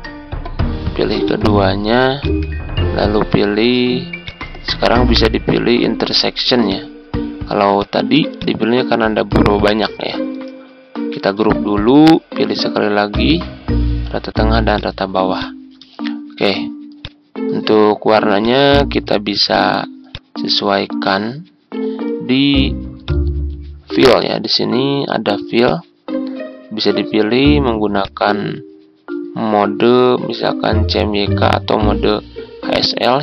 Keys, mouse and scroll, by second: 1.2 click, 2.1 shift+click, 4.1-5.2 drag, 11.1 ctrl+g, 13.0 click, 15.9-16.3 ctrl+scroll down 1, 16.9-18.2 drag, 19.4 shift+click, 20.0 click, 20.6 ctrl+z, 23.0-33.2 drag.